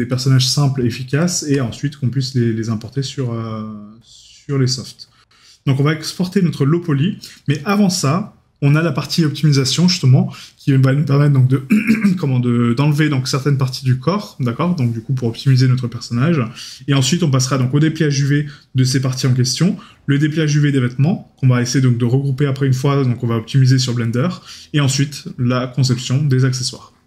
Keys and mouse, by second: 1.3 right click.